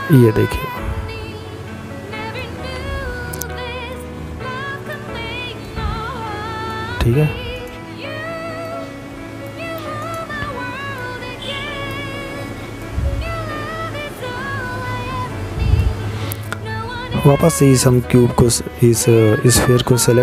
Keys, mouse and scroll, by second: 1.8 click, 3.2 middle click, 5.3 right click, 6.4 click, 7.7 right click, 8.8 click, 10.5 middle click, 15.4 right click.